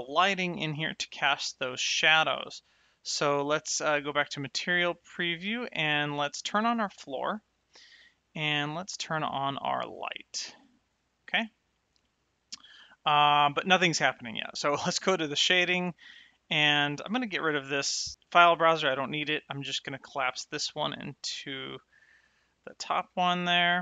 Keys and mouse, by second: 3.4 click, 6.8 click, 10.2 click, 15.0 click, 19.9 click, 22.0 middle click.